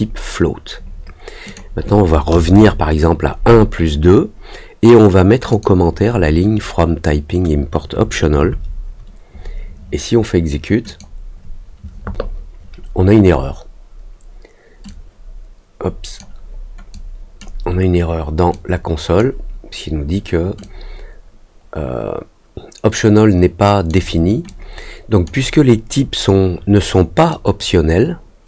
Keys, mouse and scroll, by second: 1.4 click, 5.4 click, 10.8 click, 14.8-16.1 drag, 16.9 click, 18.5 click, 20.5-23.8 drag, 24.4 click, 27.2-28.4 drag.